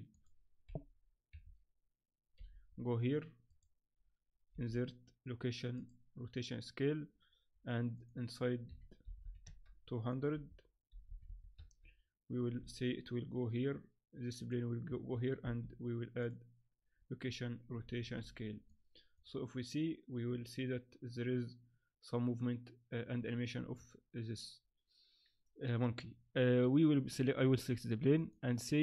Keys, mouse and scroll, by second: 1.3 KP_7, 2.3 g, 4.5 i, 8.0 click, 9.2 0, 10.1 click, 11.3 0, 12.6 g, 15.4 i, 17.8 alt+a, 18.2 z, 18.7 middle click, 23.6 Escape, 26.6 right click, 28.2 click.